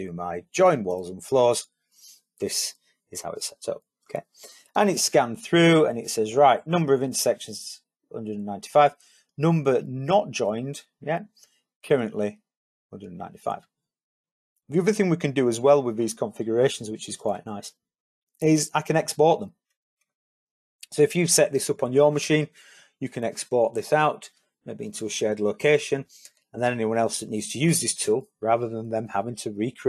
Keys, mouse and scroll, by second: 19.4 click.